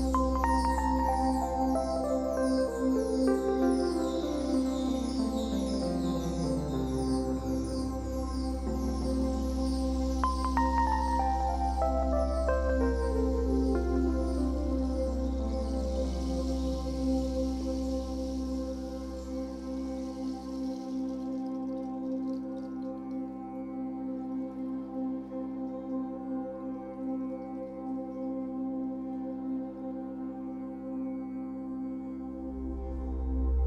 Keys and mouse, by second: 2.8 space, 4.9-8.3 drag, 8.5 click, 10.2 click, 11.5-13.2 shift+drag, 14.3 Delete, 15.0-18.3 drag, 19.8-21.7 alt+drag, 21.8 ctrl+s, 22.5 alt+click, 26.7 0, 28.0 alt+shift+click, 28.5-32.1 ctrl+alt+drag, 33.0 ctrl+alt+click, 33.2 typing, 33.5 click.